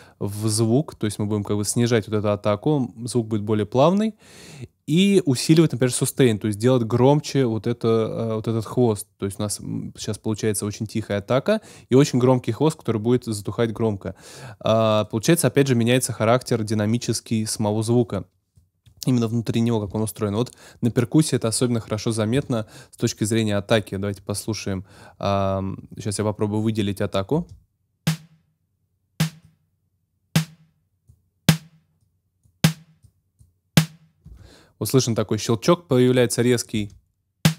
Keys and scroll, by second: 27.3 space, 34.2 space, 36.7 space.